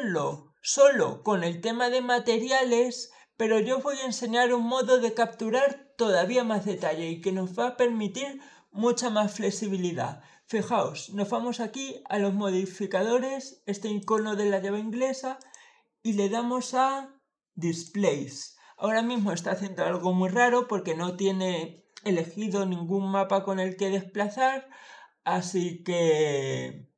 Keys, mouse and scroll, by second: 13.8 click, 15.2 click, 17.5 click.